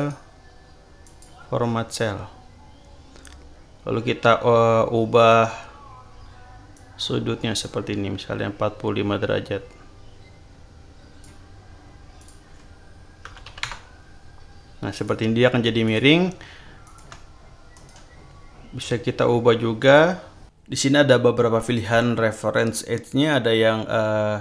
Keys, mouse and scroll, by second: 1.0 click, 6.7-11.4 drag, 12.2 click, 13.2 BackSpace, 13.4 5, 13.6 Return, 14.9 click, 15.8 click, 16.8 shift+click, 17.7 right click, 19.8 click.